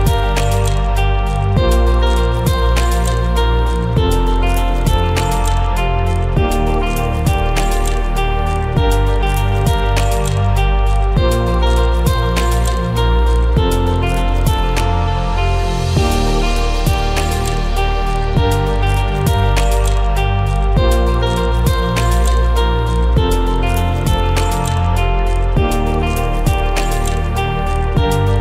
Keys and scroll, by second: 2.5 ctrl+=, 8.9 ctrl+shift+a, 10.2 ctrl+shift+a, 10.9 ctrl+=, 20.6 ctrl+shift+a, 22.7 ctrl+shift+a, 25.6 ctrl+shift+a, 26.6 ctrl+z, 28.3 ctrl+shift+a.